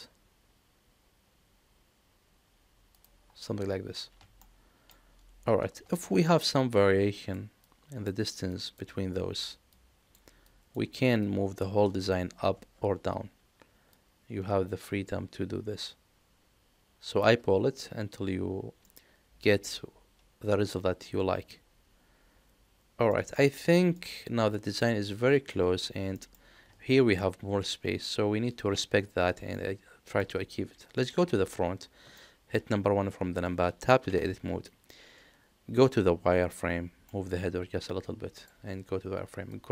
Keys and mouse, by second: 4.4-4.8 shift+middle drag, 13.8-17.2 drag, 18.8-21.1 middle drag, 21.4-23.0 middle drag, 23.3 shift+middle click, 23.7 middle click, 24.5 middle click, 26.2 middle click, 29.5-30.1 middle drag, 31.0 KP_1, 32.1-32.5 shift+middle drag, 34.0 Tab, 36.5 middle click, 38.3 click, 39.5 click.